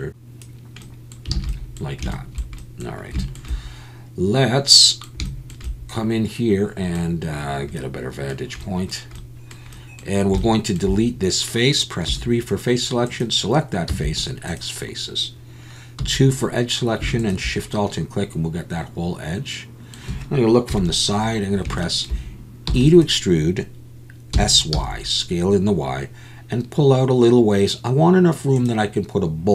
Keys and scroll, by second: 1.3 alt+a, 12.1 3, 13.9 x, 16.0 2, 20.7 KP_3, 22.7 e, 24.3 s, 24.7 y.